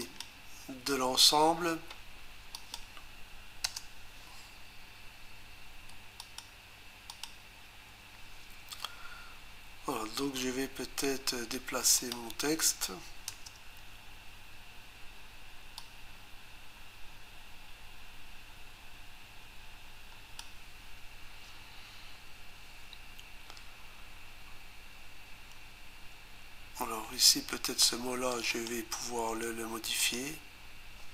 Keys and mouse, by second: 2.5 click, 3.6 Return, 12.0 click, 13.3 Return, 15.8 click, 28.3 click, 28.5 click, 28.7 double click, 30.0 click.